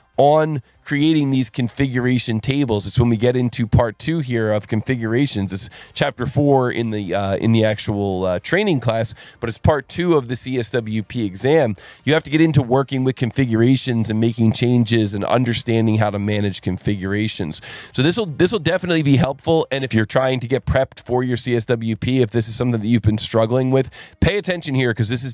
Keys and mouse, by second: 0.1 click.